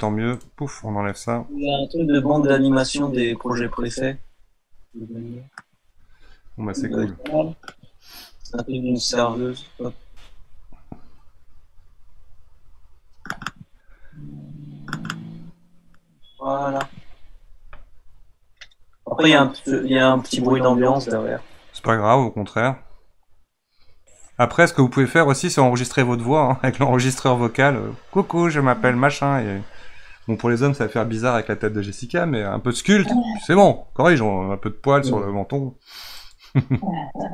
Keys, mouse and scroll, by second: 7.2-10.3 middle drag.